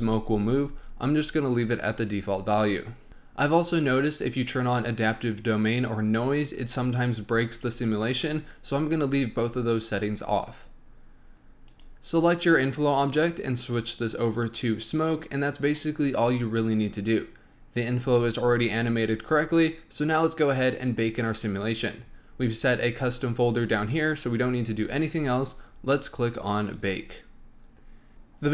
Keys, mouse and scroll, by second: 11.6 click, 13.7-16.7 drag, 20.6 click, 22.1-23.1 scroll down 14, 24.2-25.9 scroll up 16, 25.9-26.6 scroll up 1, 26.6 click, 28.2-28.5 drag.